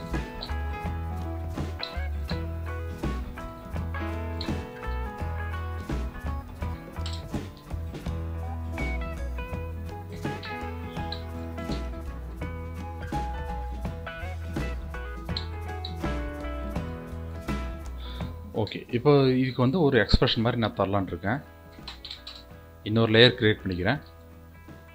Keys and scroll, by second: 20.8 ctrl+shift+n.